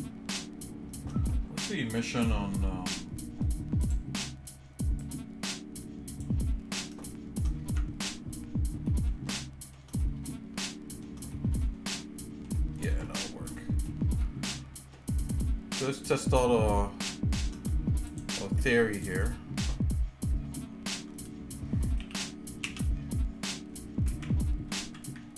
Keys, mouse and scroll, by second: 3.8 click, 7.0 shift+middle click, 7.7 Tab, 8.3-8.6 scroll down 2, 8.9 middle click, 9.3 shift+middle click, 10.0 middle click, 10.7 shift+middle click, 11.3 middle click, 12.0 shift+middle click, 12.6 shift+middle click, 13.1 shift+middle click, 13.6 middle click, 14.2 shift+middle click, 15.8 shift+click, 18.1 shift+click, 18.9 shift+click, 19.8 shift+middle click, 22.1 r.